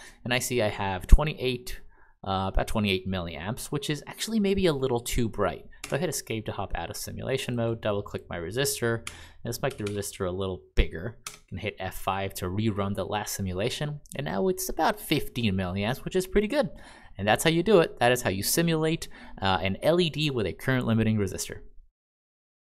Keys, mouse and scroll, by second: 5.8 Escape, 9.0 2, 9.6 0, 9.8 0, 11.2 F5.